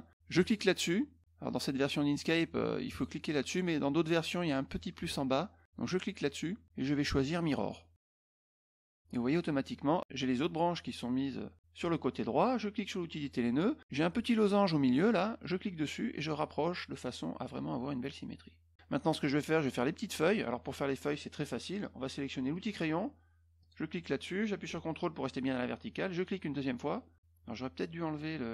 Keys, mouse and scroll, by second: 0.4 click, 2.9 click, 3.3 click, 5.8 click, 13.1 click, 15.4-18.7 drag, 20.1 middle click, 22.5 click, 23.6 click, 26.1 ctrl+click.